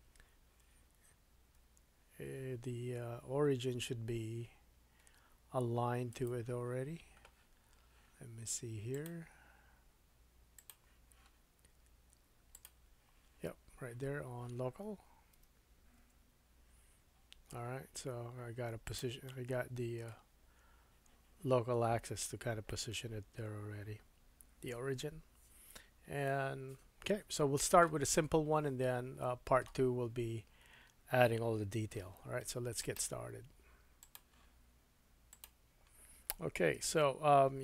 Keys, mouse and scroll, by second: 8.9-19.0 drag, 15.3 r, 19.0-25.7 middle drag, 28.2-29.1 scroll down 4, 29.1-32.8 shift+middle drag, 32.8-35.4 drag, 36.8-37.6 drag, 36.8 KP_1.